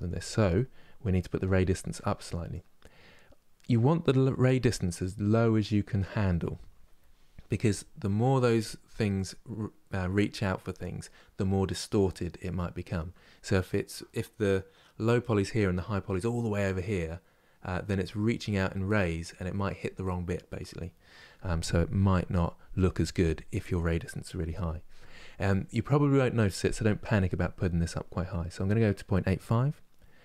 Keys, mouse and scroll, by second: 0.0 ctrl+space, 2.6-5.2 drag.